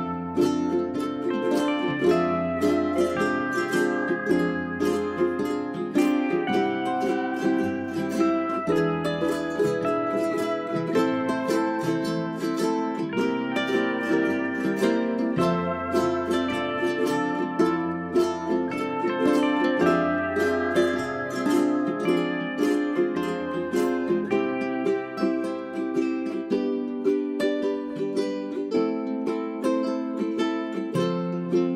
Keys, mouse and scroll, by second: 12.7 right click, 13.5 right click, 14.3 click, 14.7 Delete, 14.9 right click, 15.9 click, 18.3 right click, 18.8 click, 19.5 click, 22.9 shift+click, 23.9 Delete, 24.1 click, 25.7 Delete, 26.1-29.9 drag, 30.5 ctrl+z, 30.7 click.